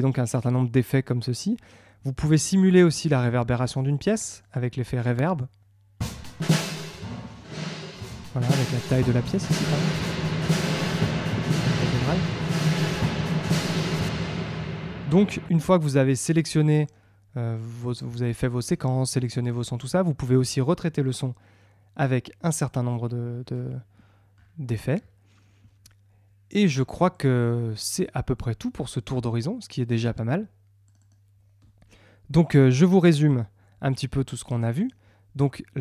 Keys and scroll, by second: 6.2 space, 14.2 space.